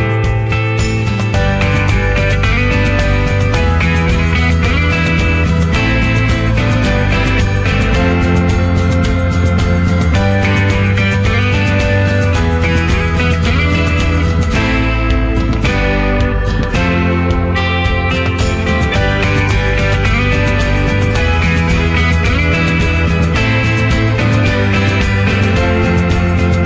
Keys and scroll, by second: 15.7 ctrl+0, 19.7 ctrl+j.